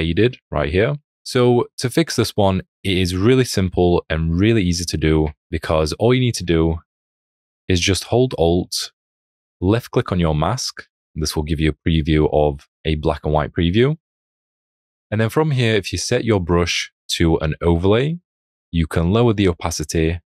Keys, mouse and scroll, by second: 10.5 alt+click.